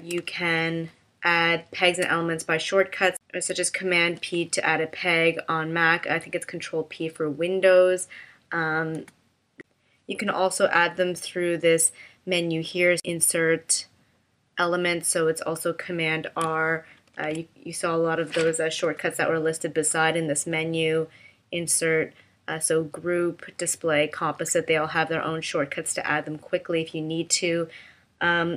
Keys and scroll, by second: 0.1 space, 4.0 super+p, 9.0 BackSpace, 17.1 super+r, 18.9 BackSpace, 19.9 BackSpace.